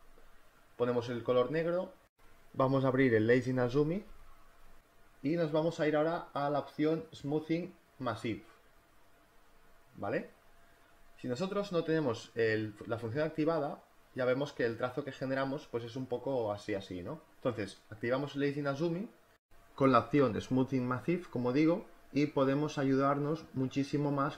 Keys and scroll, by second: 11.4 space, 19.6 space.